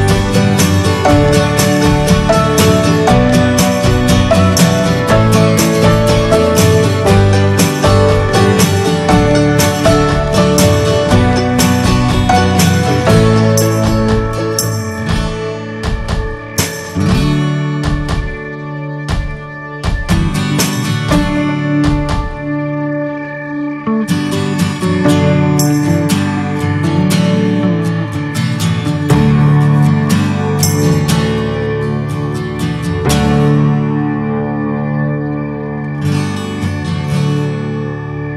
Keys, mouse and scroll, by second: 0.1 ctrl+z, 0.4-3.0 middle drag, 3.0 click, 3.9-5.1 middle drag, 5.1 right click, 5.4 middle click, 5.9 click, 6.2 shift+middle click, 6.9 click, 7.1 middle click, 7.4 click, 7.8 middle click, 8.6 ctrl+z, 8.9 shift+middle click, 9.3 ctrl+z, 10.1 middle click, 10.7 ctrl+z, 11.0 shift+middle click, 11.7 click, 12.4 middle click, 12.9-14.4 drag, 14.4 shift+middle click, 14.7 scroll up 1, 14.9-16.2 drag, 16.2 middle click, 16.6-18.5 drag, 18.5-19.6 middle drag, 19.6-23.2 drag, 23.2-24.4 right drag, 24.4 middle click, 24.7-26.6 drag, 26.6-27.6 middle drag, 27.6-30.5 drag, 30.5 middle click, 30.8-31.1 scroll up 1, 31.1 shift+middle click, 31.4 click, 31.9 shift+middle click, 32.5 click, 32.8 scroll down 2, 33.0-34.0 shift+middle drag, 34.0-35.7 drag, 35.7 right click, 36.1 middle click, 36.2 scroll up 1, 36.5-38.3 drag.